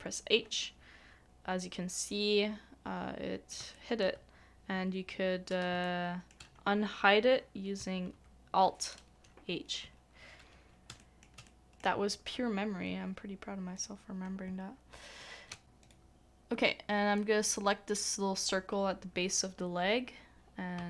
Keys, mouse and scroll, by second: 0.5 middle click, 3.6 middle click, 3.7 shift+middle click, 5.8 shift+middle click, 8.1 alt+h, 10.9 alt+h, 11.0 shift+middle click, 11.4 shift+middle click, 15.8 alt+click, 17.2 alt+middle click.